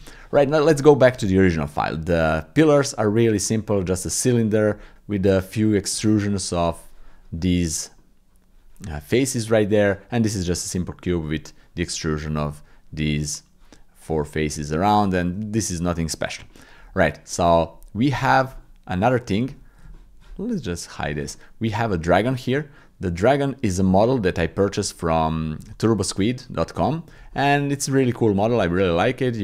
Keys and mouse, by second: 0.8 shift+middle click, 1.3 middle click, 3.2 click, 5.0 middle click, 8.0 click, 9.1 click, 9.2 middle click, 9.5 click, 9.6 middle click, 10.7 middle click, 10.9 click, 11.3 click, 13.0 click, 14.6 click, 16.4 shift+click, 17.3 click, 18.2 shift+middle click, 18.6 middle click, 19.4 ctrl+middle click, 19.9 shift+middle click, 20.9 click, 21.3 shift+middle click, 22.8 click, 22.9 middle click, 23.2 click, 23.9 click, 24.0 middle click, 24.1 click, 24.4 shift+middle click, 24.9 ctrl+middle click, 25.8 shift+middle click, 26.5 ctrl+middle click, 27.3-28.4 middle drag, 28.6 ctrl+middle click.